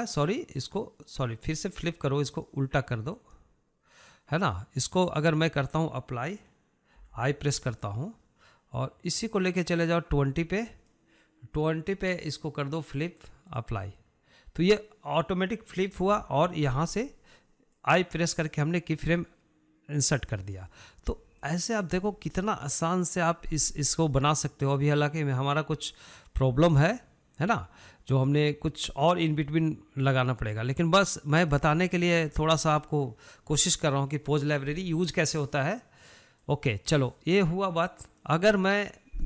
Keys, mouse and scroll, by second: 1.2 click, 1.8-2.9 drag, 3.5 click, 10.0-13.0 drag, 14.8-17.4 drag, 19.0-22.0 drag, 22.6 click, 23.0-27.8 drag, 31.4-33.5 middle drag, 33.5 scroll up 1, 33.6-36.9 shift+middle drag, 36.9-39.2 drag.